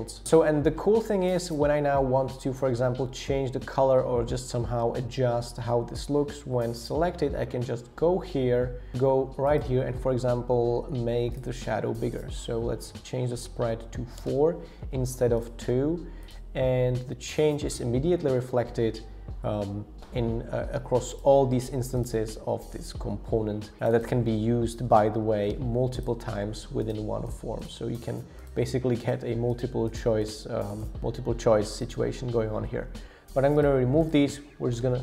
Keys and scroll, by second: 12.8 scroll down 1, 13.0-13.3 scroll up 2, 13.3 Up, 14.2 Return, 24.9 super+d, 25.0 super+d, 25.2 super+d, 34.7 BackSpace.